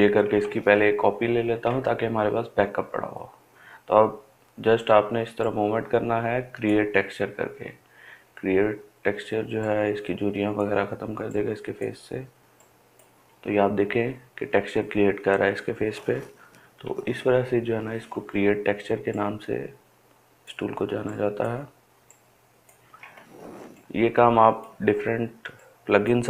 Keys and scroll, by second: 0.3 ctrl+j, 4.4 ctrl+alt+z, 16.7 [, 17.1 [, 17.6 [.